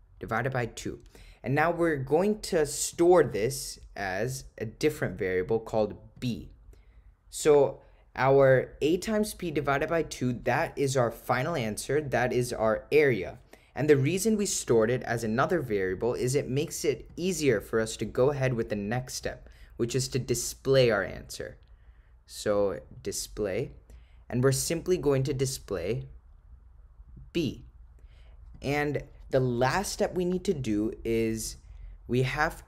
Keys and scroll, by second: 17.1 Return, 20.8 Right, 22.6 3, 28.6 Return.